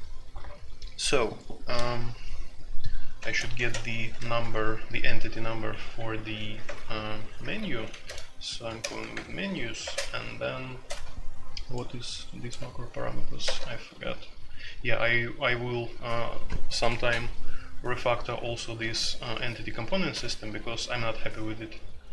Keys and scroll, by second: 3.1 (, 3.5 w, 6.2-8.0 typing, 8.8 ctrl+n, 9.1 Return, 9.8 space, 13.6 BackSpace, 13.9 s, 18.9 BackSpace, 19.1 BackSpace, 20.1 u.